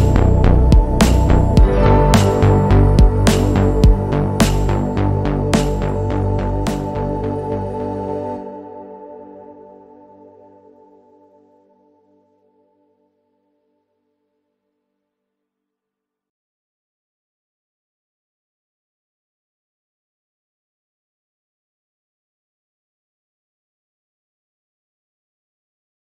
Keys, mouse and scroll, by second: 0.3 click, 1.5 click, 2.2 middle click, 3.0 shift+middle click, 4.4 click, 5.2 click, 6.2 click, 8.1 click, 8.6 click, 9.6 click, 11.3 click, 12.5 click, 15.4 click, 16.0 click, 16.7 click, 18.6 click, 20.3 click, 21.1 click, 21.9 click, 22.6 click, 24.3 click, 25.0 click.